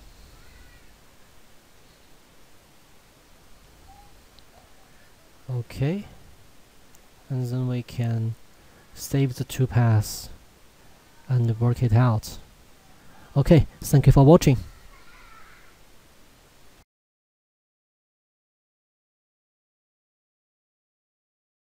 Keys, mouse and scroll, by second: 3.3 shift+middle click, 6.0 shift+middle click, 8.4 click, 16.6 F10.